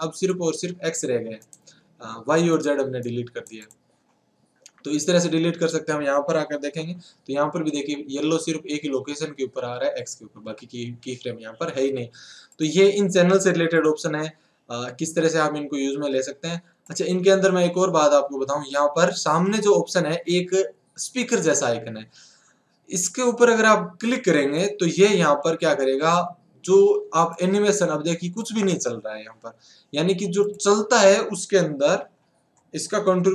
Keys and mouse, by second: 0.6-3.1 drag, 3.1 right click, 6.8 n, 10.4 n, 27.3-33.2 drag, 33.2 alt+a.